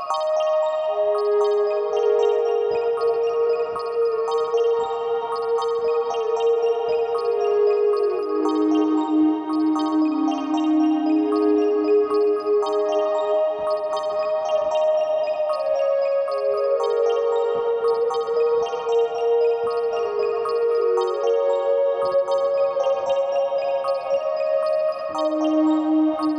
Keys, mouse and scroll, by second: 8.4-25.9 drag, 15.7-18.0 scroll up 2, 18.0-18.6 scroll up 1, 18.7-20.5 scroll up 1, 20.5 scroll down 2, 25.8 scroll down 1.